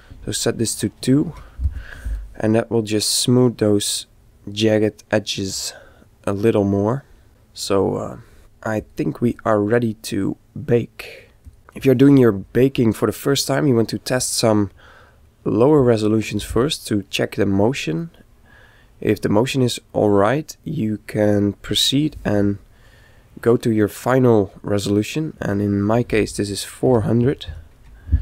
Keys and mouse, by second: 2.6-4.3 middle drag, 6.5-7.6 middle drag, 8.7-11.0 drag, 11.4 click, 16.9-20.5 middle drag, 20.7-22.6 middle drag, 25.4 click.